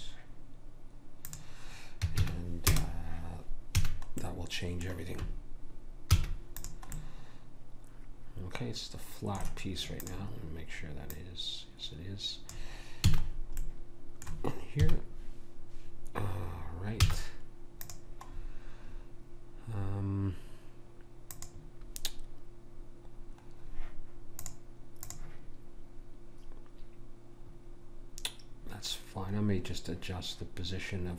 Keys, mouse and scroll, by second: 3.7 a, 4.2-6.2 middle drag, 6.2 ctrl+s, 7.0 middle click, 10.0-12.9 drag, 13.1 a, 14.8 KP_1, 17.0 z, 21.3 click, 24.4 click.